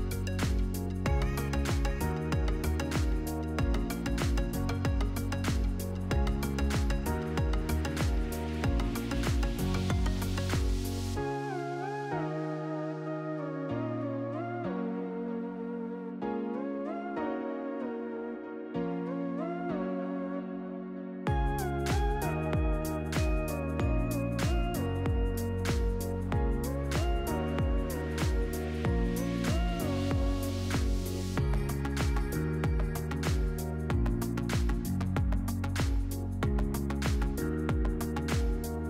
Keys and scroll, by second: 7.2 3, 8.0 Tab, 8.6 3, 9.7 7, 10.1 Return, 14.1 4, 14.5 Tab, 14.7 4, 15.1 Return.